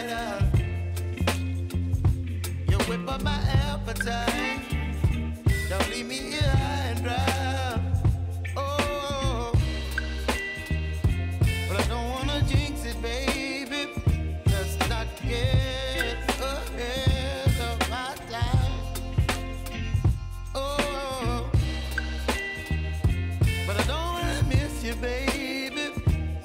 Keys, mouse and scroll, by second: 0.0 space, 1.6 click, 4.1 ctrl+d, 6.1-7.9 drag, 10.6-11.0 alt+scroll up 1, 11.3 click, 14.2 click, 14.6-15.0 scroll down 1, 15.3 ctrl+d, 15.8 click, 18.0 click, 23.5 s, 24.2-26.4 drag.